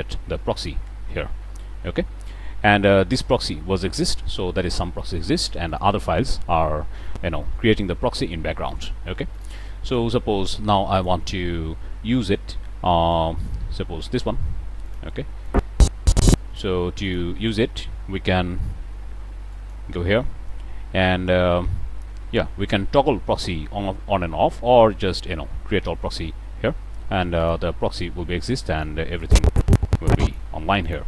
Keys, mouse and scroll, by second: 0.5 click, 5.6 click, 6.6 scroll down 1, 7.1-7.6 scroll up 1, 7.8-8.2 scroll down 1, 9.2 click, 9.8 click, 10.9 click, 13.0 click, 14.8 click, 15.1 middle click, 15.4-16.7 drag, 16.7 middle click, 17.0 shift+click, 17.3 shift+middle click, 17.4 shift+click, 17.7 shift+middle click, 18.3 g, 19.4-19.8 drag, 26.0 click, 26.3-27.3 middle drag, 27.3 click, 28.1-29.0 drag, 29.1-30.5 drag, 30.7 click.